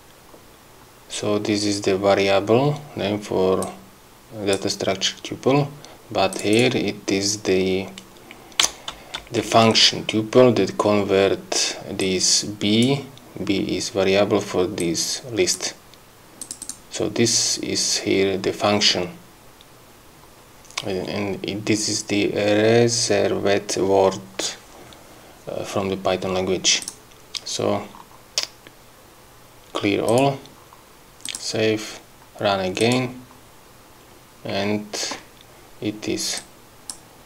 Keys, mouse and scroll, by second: 0.6 scroll up 2, 3.6 click, 5.4 scroll up 1, 6.3 click, 12.0 click, 14.8 click, 16.4 click, 26.8 click, 30.1 click, 31.2 click, 32.8 click, 36.4 click.